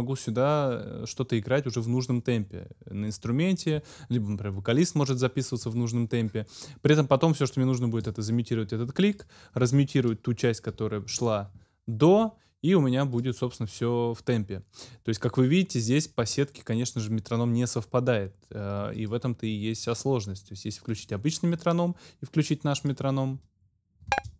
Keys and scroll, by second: 10.7 ctrl+m, 24.1 space.